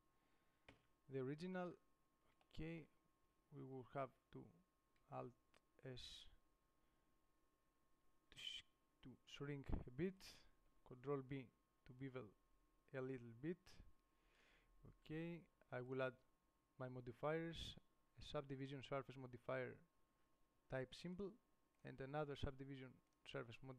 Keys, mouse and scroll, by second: 1.0 Tab, 2.8-4.3 drag, 5.1 middle click, 5.2 alt+s, 11.1 ctrl+b, 12.4-13.1 scroll up 1, 14.2-14.6 scroll up 1, 14.6 click, 17.9-19.1 middle drag.